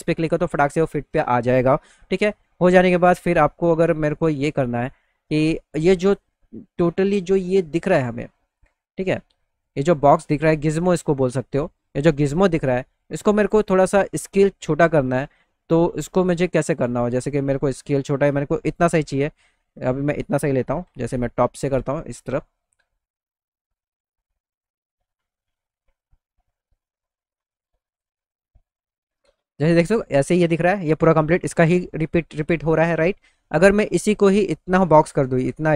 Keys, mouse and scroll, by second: 2.6-3.6 alt+middle drag, 9.7 click, 10.4 click, 13.9 middle click, 16.4 middle click, 17.2 middle click, 20.8 t, 21.6 z, 21.8 middle click, 22.6 middle click, 26.1 middle click, 27.0-28.1 middle drag, 28.5 middle click, 28.9 middle click.